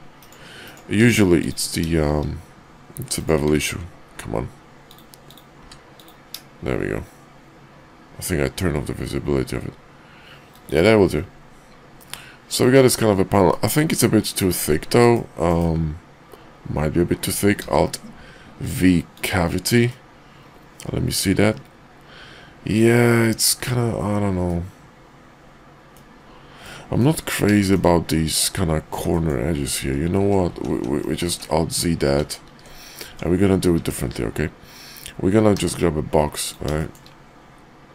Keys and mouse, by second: 1.0 q, 3.6 ctrl+`, 5.5 q, 12.0-12.5 middle drag, 12.7 shift+middle drag, 13.5-14.6 middle drag, 14.9 KP_5, 15.4 KP_5, 17.5 alt+v, 19.8-23.6 middle drag, 24.4-26.0 middle drag, 26.6-27.0 middle drag, 27.5 shift+middle drag, 29.1 middle drag, 29.8 ctrl+z, 30.1 ctrl+z, 30.5 ctrl+z, 30.7 ctrl+z, 30.9 ctrl+z, 31.1 ctrl+z, 31.3 ctrl+z, 32.1 ctrl+z, 33.1 Tab, 33.7 Tab, 35.5 d, 36.8 shift+middle drag.